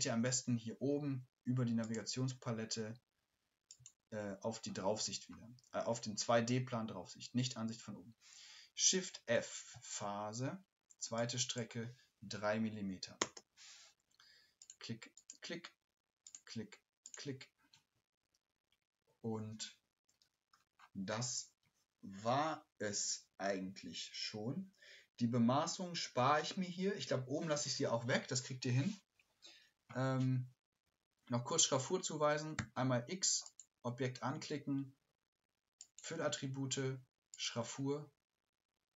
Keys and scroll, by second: 8.8 shift+f, 9.1 shift+f.